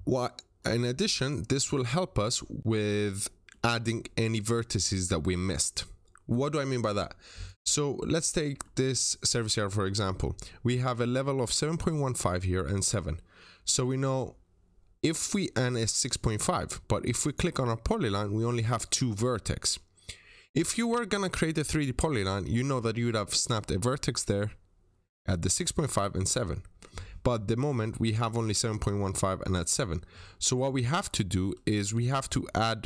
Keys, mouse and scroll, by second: 0.0-0.5 scroll up 1, 0.5 middle click, 1.9-3.2 scroll up 1, 3.4 middle click, 6.7 click, 7.7 middle click, 8.5 scroll down 1, 9.5-9.9 scroll up 1, 17.1 click, 31.3 Escape, 31.7 typing, 31.8 Return, 32.1-32.5 scroll up 1.